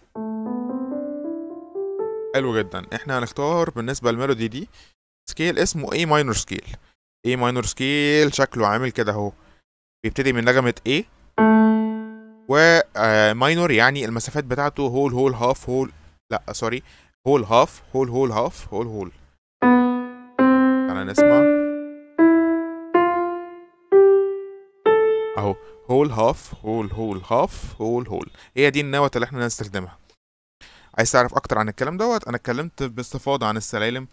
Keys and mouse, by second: 4.4 right click, 5.1 click, 11.2 click, 19.5 click, 20.2 click, 21.0 click, 22.1 click, 22.8 click, 23.8 click, 24.7 click, 33.8 ctrl+click.